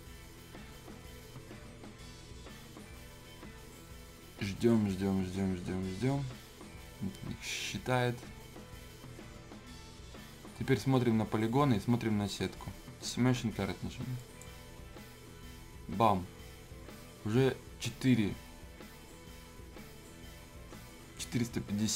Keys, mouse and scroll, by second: 14.2 click.